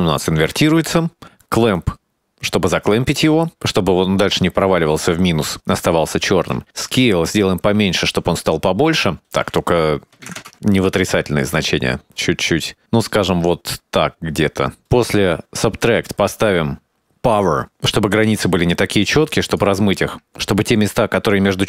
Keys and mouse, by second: 2.1 click, 4.6 middle click, 6.5-11.0 shift+drag, 11.2-14.3 shift+drag, 14.6 click, 14.9 middle click, 15.7 middle click, 16.6 click, 17.3 middle click, 18.0 middle click, 18.3 shift+a, 21.2 click.